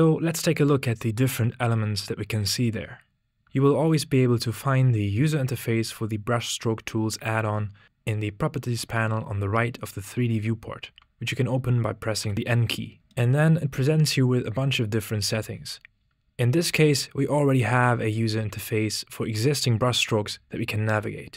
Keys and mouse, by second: 12.2 n, 16.4 middle click.